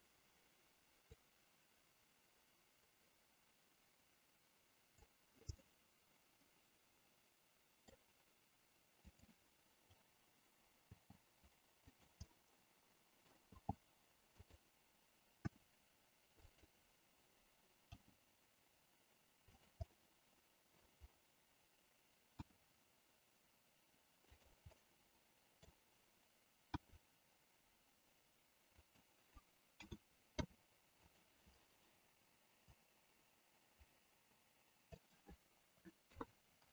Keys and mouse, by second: 1.2-5.0 drag, 5.7-7.9 middle drag, 9.0 click, 10.9 g, 11.9 click, 12.4-13.4 middle drag, 13.6 g, 14.6 click, 15.4 r, 16.6 click, 17.9 g, 19.6 click, 19.9 middle click, 22.4 r, 24.3 click, 24.8 middle click, 26.8 r, 28.7 click, 29.8 a, 30.3 i, 32.7-35.0 drag, 36.0 KP_3.